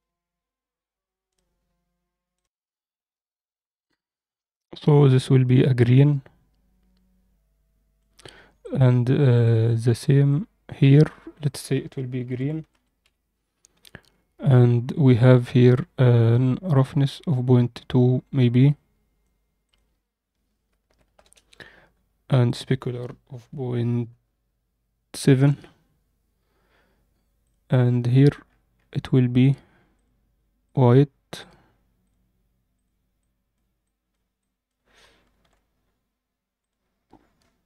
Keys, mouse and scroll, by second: 3.7 click, 8.6 click, 9.4 click, 11.4-13.7 drag, 12.7 e, 14.3-14.9 scroll down 1, 14.9-15.9 scroll down 2, 16.6-19.1 drag, 19.6-21.2 drag, 22.4-25.3 drag, 27.5 click, 28.4-28.9 scroll up 3, 29.4 drag, 29.9-30.7 drag, 31.3 click, 32.0 click, 35.5 alt+a, 35.6-37.5 scroll down 2, 37.5 click.